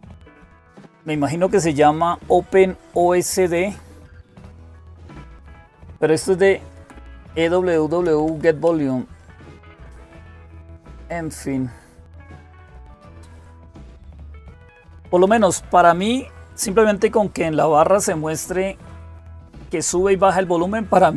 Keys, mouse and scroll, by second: 0.3-1.1 Right, 1.8 Right, 1.8 Left, 3.2 Right, 3.5 Right, 5.9 Up, 5.9 Down, 5.9 Right, 6.6 Left, 6.8 Left, 7.0 Left, 7.1 Left, 7.4 Left, 7.9 Right, 8.1 Right, 8.5-9.2 typing, 9.3 Up, 9.7 Up, 10.4-11.1 typing, 11.4 Up, 11.6-12.9 Up, 14.7 Up, 14.7 Down, 14.9 Down, 15.0 Down.